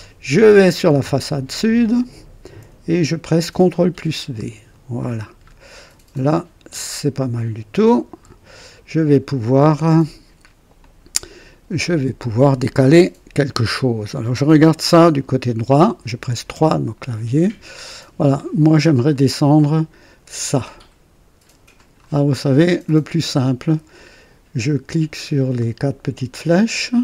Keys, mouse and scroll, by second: 1.1 click, 3.6 ctrl+v, 5.1 scroll down 1, 6.0-8.2 drag, 9.7 scroll up 1, 10.7-12.4 drag, 16.4 KP_3, 17.1 scroll up 1, 17.5 right click, 18.5-18.8 scroll up 1, 19.0 right click, 21.7 click, 22.3 scroll down 1, 22.8-23.7 right drag, 26.3 click.